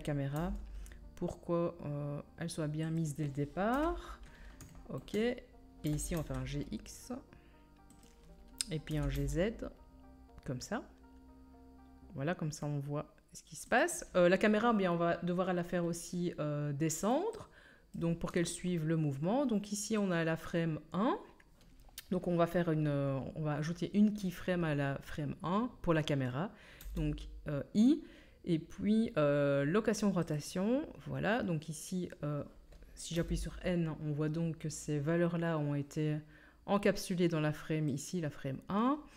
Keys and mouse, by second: 0.3 g, 3.0-13.1 drag, 3.7 KP_7, 5.8 g, 13.1-15.5 right drag, 15.5-19.3 drag, 17.4 middle click, 17.4 right click, 19.3-19.7 middle drag, 26.8 i, 33.1 n, 38.0-39.1 drag.